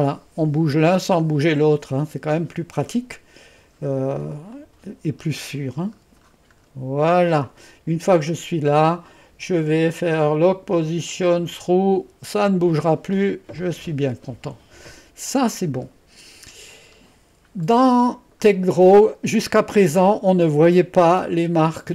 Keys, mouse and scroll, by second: 0.8 scroll down 1, 2.4 middle click, 4.6 click, 5.2-7.3 scroll down 1, 7.3-9.7 scroll down 1, 10.4 click, 10.9 click, 11.6 click, 12.1 click, 13.6-14.7 drag, 15.6-16.6 scroll up 1, 16.6-17.5 scroll up 1, 17.5 scroll up 1.